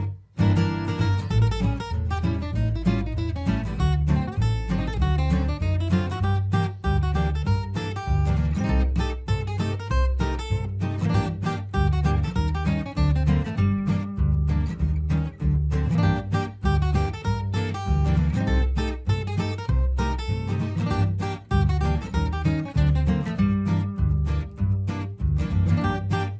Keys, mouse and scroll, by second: 2.3 F4, 2.9 F2, 3.1-5.8 drag, 8.4-9.8 typing, 10.1 Return, 12.0 ctrl+space, 13.4 click, 16.1 ctrl+k, 17.3-20.5 drag, 20.8 shift+F2, 22.2 F2, 22.4 click, 23.1 Escape, 23.7-25.6 drag, 25.6 ctrl+u, 25.9 F2, 26.1-26.3 drag.